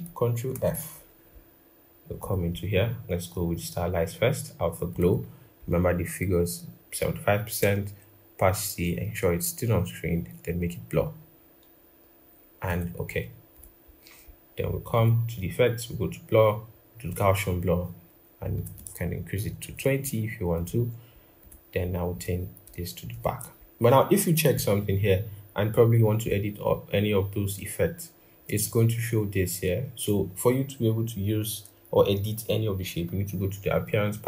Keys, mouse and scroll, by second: 0.0 typing, 19.2 shift+Up, 22.9 ctrl+[.